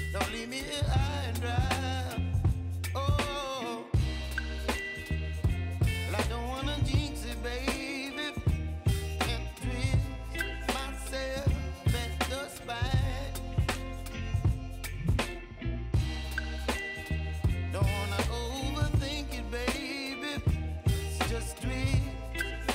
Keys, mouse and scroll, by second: 2.9-10.6 drag, 13.5 p, 14.6 click, 15.4-15.9 typing, 17.7 click, 19.3 j, 21.0-22.7 drag.